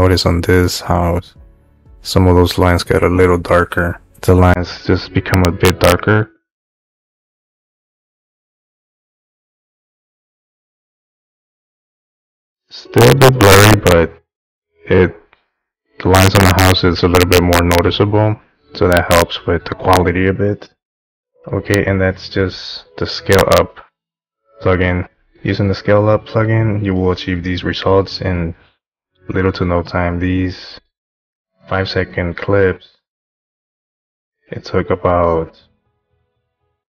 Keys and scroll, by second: 21.4 Home.